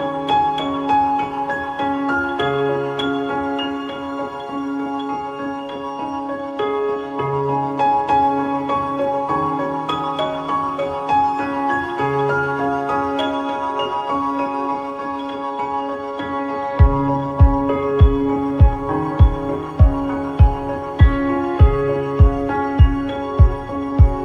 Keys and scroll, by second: 13.5 Return.